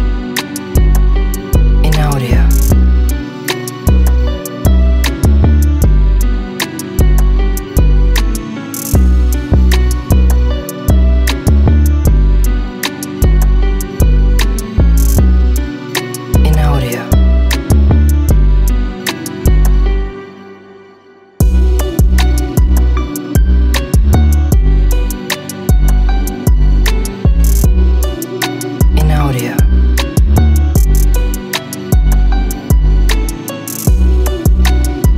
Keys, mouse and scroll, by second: 3.3 e, 4.5 click, 6.5 z, 8.0 Return, 9.3 click, 9.5 shift+0, 10.1 click, 11.9 click, 12.1 shift+click, 14.2 click, 15.7 click, 18.3 click, 19.7 click, 21.0 n, 21.8-22.8 drag, 23.4 n, 24.2-25.3 middle drag, 25.4 shift+middle click, 27.9 e, 30.2 click, 31.9 click, 32.6 click, 34.0 s, 34.9 click.